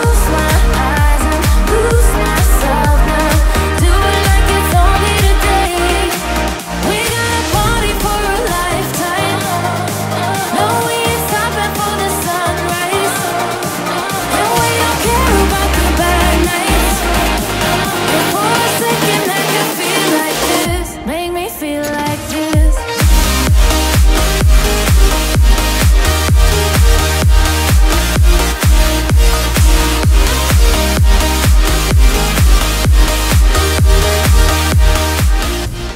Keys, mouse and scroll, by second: 1.9 ctrl+z, 2.2 ctrl+z, 2.5 ctrl+z, 2.8 ctrl+z, 3.2 ctrl+z, 4.1 ctrl+z, 4.9 ctrl+z, 6.1 ctrl+z, 7.0 ctrl+z, 8.2 ctrl+z, 12.9 ctrl+z, 13.1 ctrl+z, 13.5 ctrl+z, 13.9 e, 14.1 ctrl+z, 15.1 ctrl+z, 15.2 ctrl+z, 15.4 e, 15.6 ctrl+z, 15.9 ctrl+z, 16.3 ctrl+z, 16.9 ctrl+z, 17.6 e, 17.7 ctrl+z, 18.0 ctrl+z, 18.2 ctrl+z, 18.4 ctrl+z, 20.2 ctrl+z, 20.5 ctrl+z, 21.1 ctrl+z, 21.9 ctrl+z, 22.3 ctrl+z, 23.3 ctrl+z, 23.8 ctrl+z.